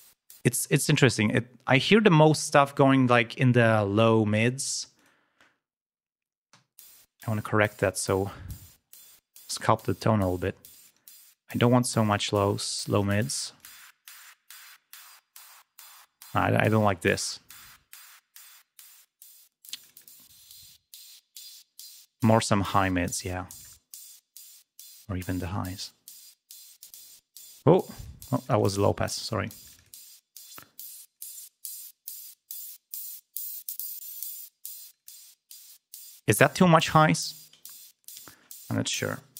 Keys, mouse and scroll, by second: 0.0 click, 0.6 space, 0.8 right click, 5.0 click, 7.5 click, 8.1 click, 9.3-11.3 drag, 11.3 click, 12.0-13.2 drag, 13.2 scroll down 2, 13.6 click, 16.1 click, 19.0 click, 19.7 click, 20.6-21.3 scroll down 3, 21.4-22.5 drag, 23.8 scroll down 2, 24.1-25.2 drag, 26.1 click, 26.7 click, 28.0 click, 28.4 click, 29.5-31.3 drag, 31.3 scroll down 1, 31.7 click, 34.9 click, 35.6 click, 36.3-37.1 scroll down 1, 37.9 click.